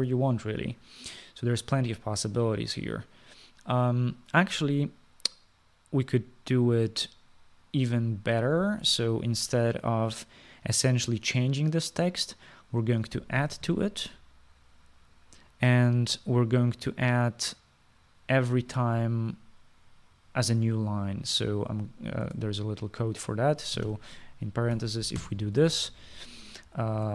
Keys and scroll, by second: 14.7 typing, 23.4 space, 24.7-26.9 typing.